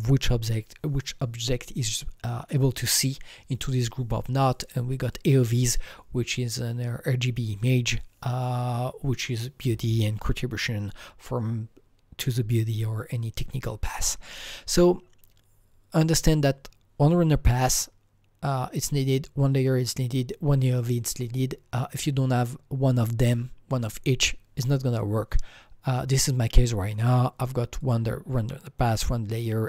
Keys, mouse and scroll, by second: 13.8 Escape, 13.9 Right, 26.1 click, 26.9 click, 27.8 click, 28.8 click.